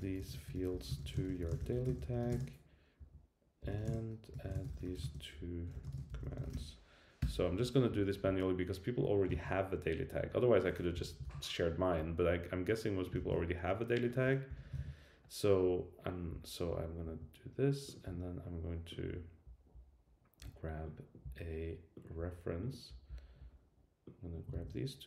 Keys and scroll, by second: 7.2 Return, 9.3 super+c, 11.2 super+v, 13.1 super+c, 14.7 super+v, 24.5 super+c.